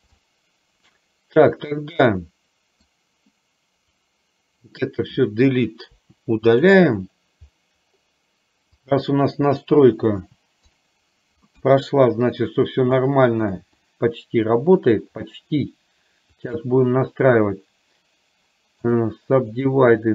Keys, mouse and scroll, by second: 0.3 middle click, 2.2 middle click, 4.1-5.1 drag, 6.1 Delete, 8.8 click, 10.2 Delete, 11.6 KP_1, 13.2 shift+middle click, 13.8-14.9 drag, 16.4 shift+click.